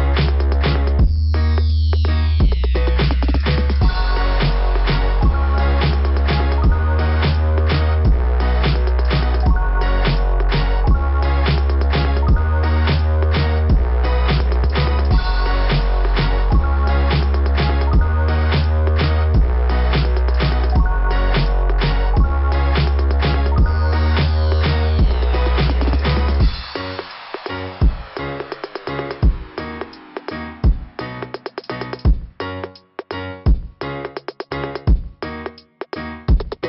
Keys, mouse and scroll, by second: 0.1 scroll down 2, 2.7 click, 3.5 click, 3.7 click, 5.9 click, 8.7 click, 10.7 click, 10.9 click, 11.2 click, 13.0 click, 13.1 click, 14.7 click, 14.8 click, 17.2 click, 17.3 click, 19.3 click, 19.7 click, 20.4 click, 21.8 scroll up 2, 24.3 click, 24.6 click, 24.6 click, 25.2 click, 25.3 click, 25.8 scroll down 1, 26.6 click, 27.3 click, 28.1 click, 28.6 click, 29.5 click, 29.6 click, 30.0 click, 30.1 click, 30.5 scroll down 2, 31.6 click, 31.7 click, 32.4 click, 33.3 click, 33.9 click, 34.5 right click, 35.7 click.